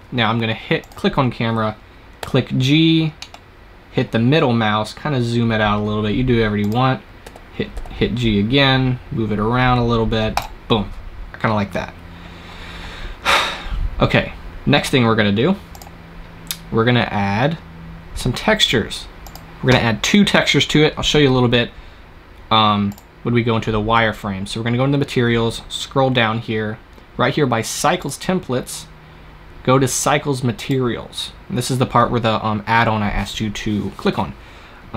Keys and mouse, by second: 0.7-3.7 drag, 2.1 g, 6.6 click, 7.1 g, 19.1-21.0 drag, 22.8-24.7 drag, 24.7-27.9 middle drag, 27.9-29.8 drag.